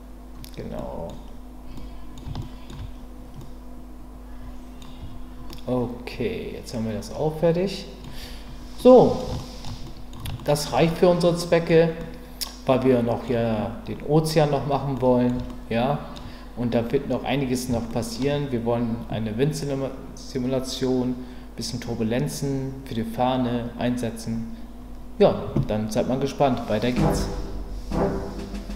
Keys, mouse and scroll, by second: 0.8-2.2 middle drag, 1.1-1.7 scroll down 1, 2.4 shift+middle click, 3.4-5.0 middle drag, 5.0 Tab, 5.5-8.0 middle drag, 8.8-9.2 middle drag, 9.3-9.6 shift+middle drag, 9.8 middle drag, 10.4 shift+middle drag, 10.9-11.7 middle drag, 12.0-13.3 middle drag, 14.9 middle click, 15.5-16.1 shift+middle drag, 17.9 shift+middle click.